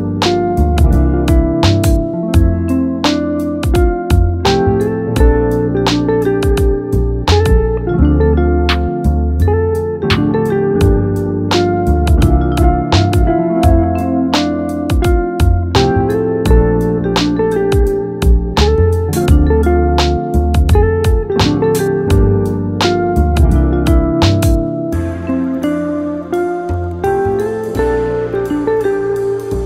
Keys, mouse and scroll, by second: 0.6-3.6 drag, 5.0-8.1 drag, 8.4-9.0 scroll down 2, 9.0-12.1 shift+middle drag, 12.1-14.0 scroll down 1, 14.0-17.1 drag, 18.1-21.2 drag, 23.6-29.3 drag, 29.3 scroll down 1, 29.5-29.6 middle drag.